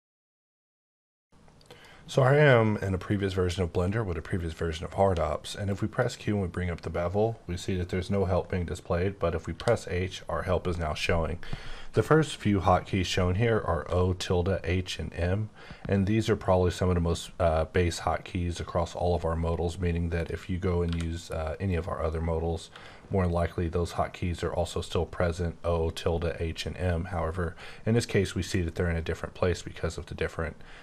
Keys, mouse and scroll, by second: 5.0 q, 5.7 click, 7.2-7.9 scroll up 3, 7.9-9.1 scroll up 2, 9.1-9.5 scroll up 1, 9.5 h, 20.2 click, 20.9 q, 21.7 click, 22.7 x.